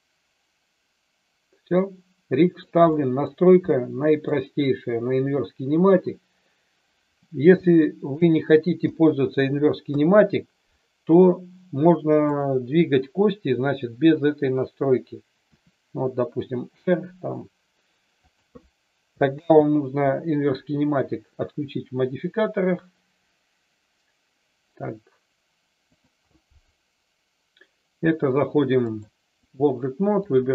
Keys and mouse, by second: 2.9-3.2 middle drag, 3.8-4.2 middle drag, 7.6-8.1 shift+middle drag, 8.8 KP_4, 9.9 KP_3, 12.2 click, 15.5 r, 19.2 ctrl+z, 26.0 click, 28.9 click.